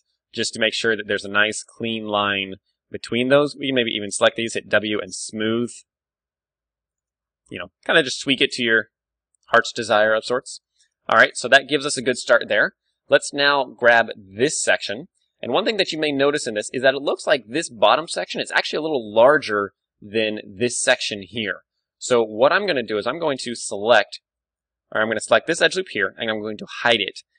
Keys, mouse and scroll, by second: 2.6 Tab, 3.2 w, 5.9 alt+s, 6.9-8.6 drag, 7.1 Tab, 7.7-8.9 middle drag, 8.5 a, 10.3 KP_1, 11.0 ctrl+w, 12.5 Tab, 13.2 a, 13.6 middle click, 13.8-15.3 d, 14.1-16.0 drag, 16.0-18.5 right drag, 19.8 d, 20.0-21.8 drag, 21.1 middle click, 22.0 right click, 22.8-25.1 middle drag, 25.7-27.2 right drag, 26.8 h.